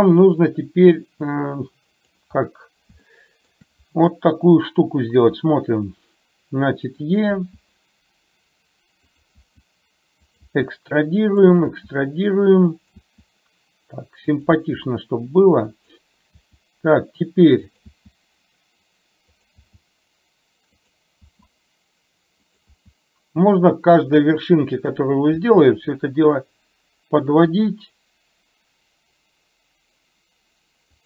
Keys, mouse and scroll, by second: 0.6-2.9 drag, 3.2 shift+middle click, 5.3 e, 7.4 e, 11.8 e, 14.6 e, 16.4 e, 19.7 e.